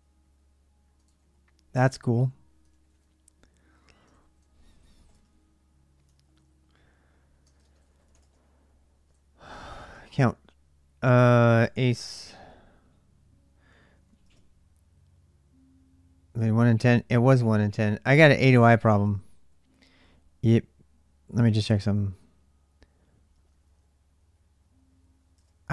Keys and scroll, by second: 0.3 typing.